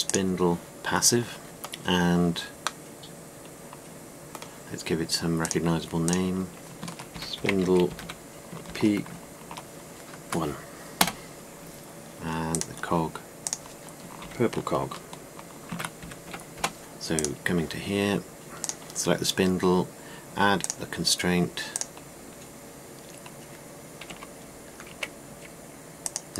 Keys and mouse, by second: 3.6-4.1 middle drag, 4.3 middle click, 6.0-13.2 middle drag, 16.2-17.8 middle drag, 19.7-21.4 drag.